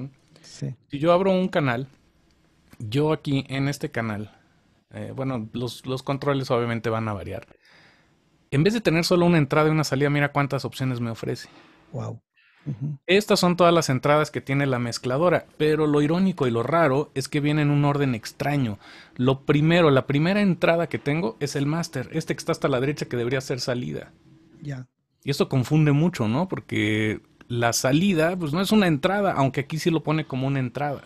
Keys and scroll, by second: 0.5 shift+super+n.